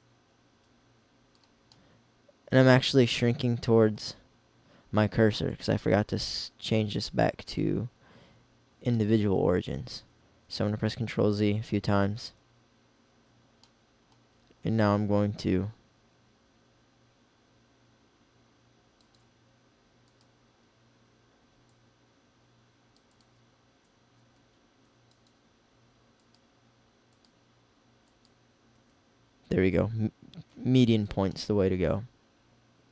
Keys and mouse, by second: 7.4-9.0 drag, 10.8 ctrl+z, 11.0 ctrl+z, 11.5 ctrl+z, 11.9 ctrl+z, 14.7 s, 20.9 click, 24.3 s, 25.4 click, 28.9 s, 31.3 middle click, 31.8 click.